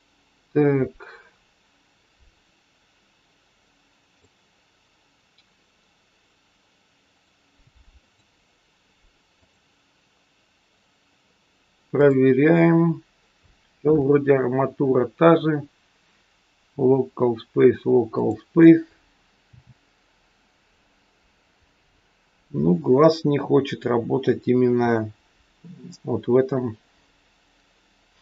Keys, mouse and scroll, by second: 2.0 click, 7.1 click, 8.0 click, 11.8 click, 18.1 click, 19.4 r.